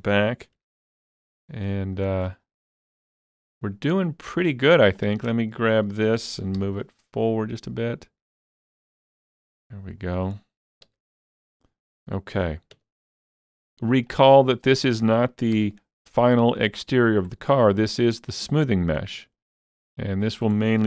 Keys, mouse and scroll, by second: 0.8 alt+z, 0.9-1.5 scroll up 2, 1.5-1.8 scroll up 3, 1.9 shift+middle click, 2.4-4.3 scroll up 2, 4.8-5.3 scroll up 2, 5.0 click, 6.6 g, 9.0 click, 10.3-10.8 scroll down 2, 10.9 alt+z, 11.2-11.5 scroll down 1, 11.6-14.7 middle drag, 12.8 Tab, 13.4 middle click, 13.6 g, 14.7 click, 15.6 g, 17.1 click, 17.6 click, 18.4-20.8 drag, 20.6-20.8 scroll down 1.